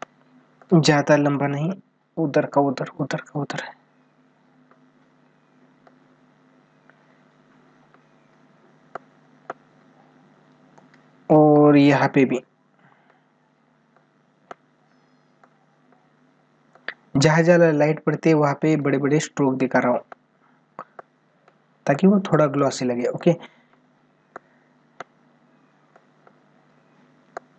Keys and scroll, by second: 10.5 space.